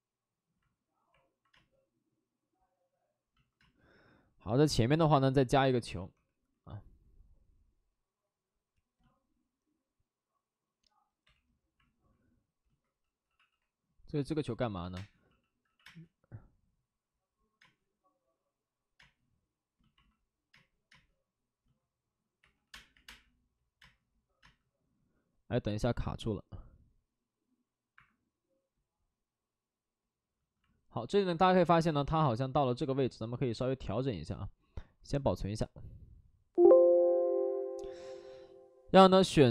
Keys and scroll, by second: 1.5 space, 3.5 space, 6.1 w, 11.2 2, 13.0-15.8 typing, 21.5-22.8 typing, 27.9 Escape, 27.9 space.